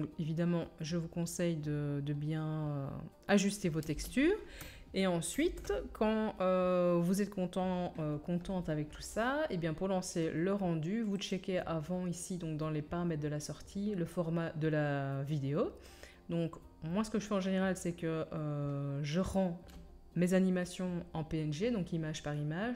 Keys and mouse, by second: 3.8 space, 5.4 ctrl+s, 11.3-22.7 drag.